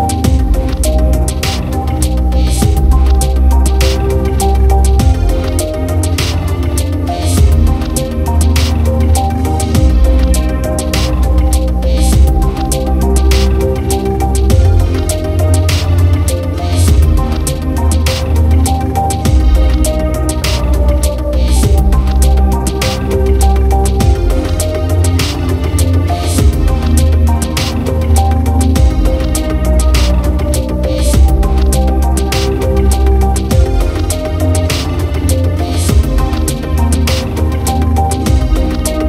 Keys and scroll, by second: 20.4 ctrl+0, 23.4 ctrl+=, 32.0 ctrl+z.